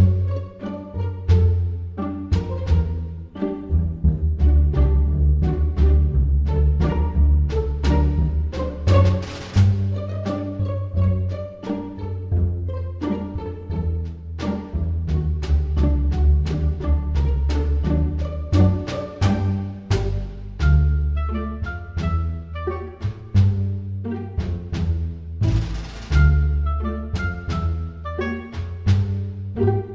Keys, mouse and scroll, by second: 11.5-12.3 scroll up 7, 12.7 middle click, 16.3 click, 19.9 click, 25.0 click, 29.0 super+r.